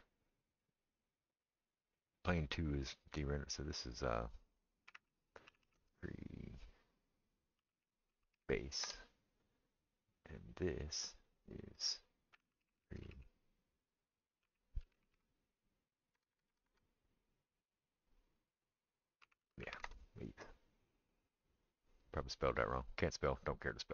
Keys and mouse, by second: 3.6 middle click, 3.7-23.9 drag, 5.6 e, 12.8 e, 16.3 BackSpace, 16.5 BackSpace.